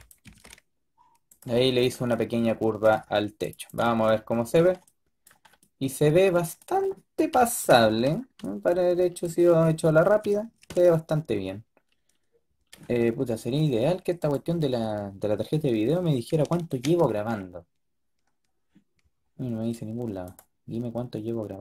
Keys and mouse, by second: 0.1 g, 3.6-5.4 drag, 6.3 middle click, 7.2 KP_5, 12.5 middle click, 14.1-16.5 drag, 16.5 ctrl+shift+w.